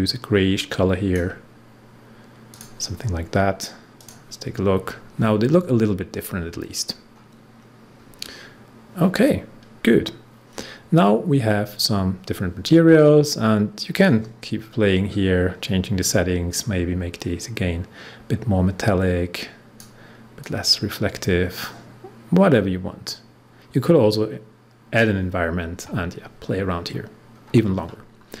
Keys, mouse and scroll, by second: 6.8 scroll down 1, 7.9 scroll up 1, 13.9 click, 14.5 scroll down 1, 16.5-26.7 drag, 26.7 scroll down 1, 27.2 scroll up 1.